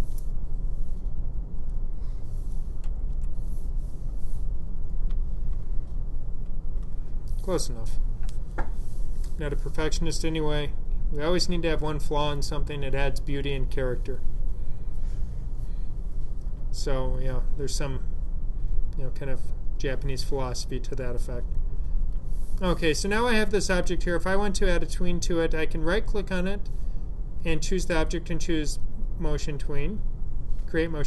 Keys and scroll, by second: 2.7 Right, 3.0 Right, 5.0 ,, 5.5 ', 6.3 ', 6.7 '.